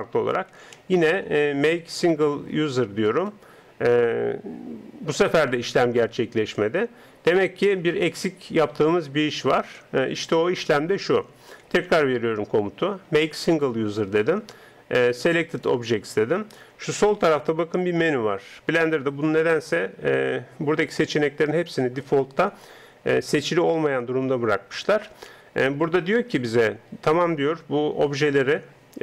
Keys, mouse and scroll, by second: 3.3 space, 6.5 Tab, 8.2 Tab, 11.8 space, 15.6-17.7 drag.